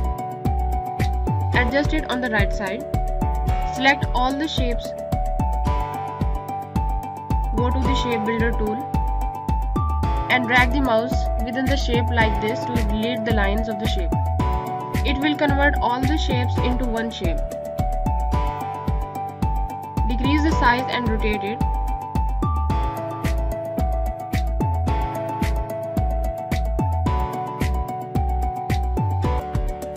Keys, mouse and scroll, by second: 11.2 scroll up 1, 11.9 click, 16.2 scroll down 1, 16.7 click, 16.9 scroll down 1, 17.2 click, 17.7 scroll down 1, 17.9 click, 22.6 click, 23.9 scroll down 1, 24.0 space, 24.1 click.